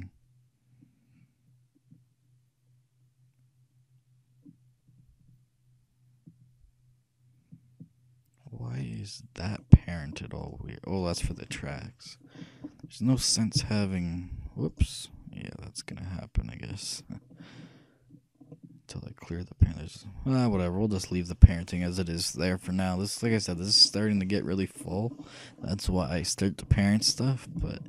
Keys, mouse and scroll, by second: 10.5-11.9 right drag, 11.9-13.7 middle drag, 13.7-15.0 right drag, 13.7 g, 16.1-17.8 middle drag, 18.7-20.5 middle drag, 27.0-27.8 scroll up 1.